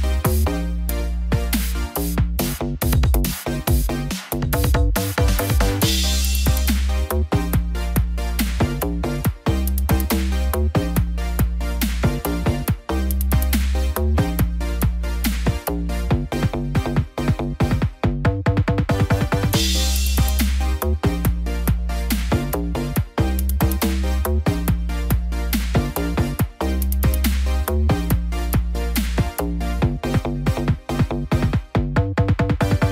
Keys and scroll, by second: 8.1 ctrl+=, 17.1 ctrl+-, 20.4 ctrl+0, 27.5 ctrl+j.